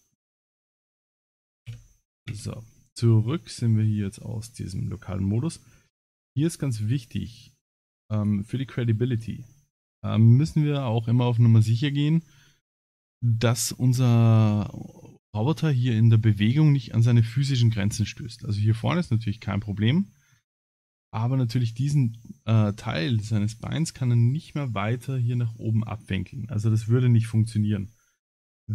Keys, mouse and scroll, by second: 1.7 KP_Divide, 2.3 Tab, 2.8 middle click, 5.3 middle click, 6.1 middle click, 7.3 Tab, 8.1 alt+click, 9.2 middle click, 13.1 middle click, 19.9 middle click.